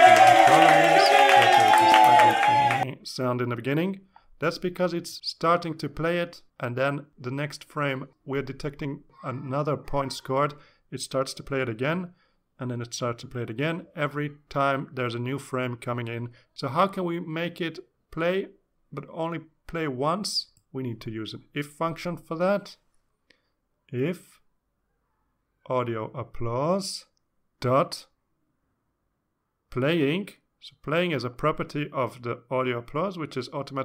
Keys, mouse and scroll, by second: 26.6 click, 27.6 click, 28.4 click, 28.9 click, 29.5 Return, 29.9-30.9 typing, 32.4 shift+4, 33.2 shift+a.